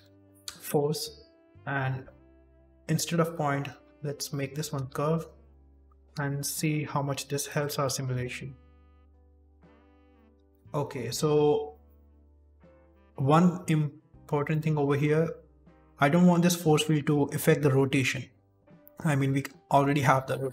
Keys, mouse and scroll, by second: 2.5 click, 4.2 middle click, 4.5-5.2 scroll down 2, 5.0 s, 5.6 middle click, 6.1 z, 6.5 scroll up 1, 7.4 click, 7.8 middle click, 8.0 shift+space, 9.7 scroll down 3, 10.1 shift+middle click, 10.4 shift+space, 14.4 middle click, 14.7-16.9 scroll up 1, 16.9-17.5 scroll up 1.